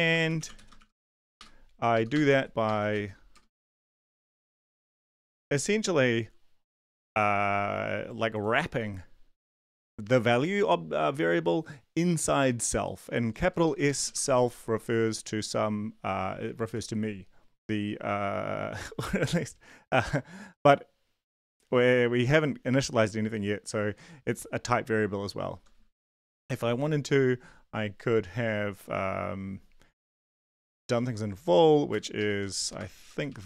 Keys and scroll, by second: 0.0-5.3 typing, 1.9 Left, 2.3 Right, 13.5 Down, 13.6 Left, 16.6 Right, 26.1 Right, 26.4 ctrl+shift+Left, 30.0-31.4 typing, 32.2 Left, 32.8-33.4 typing.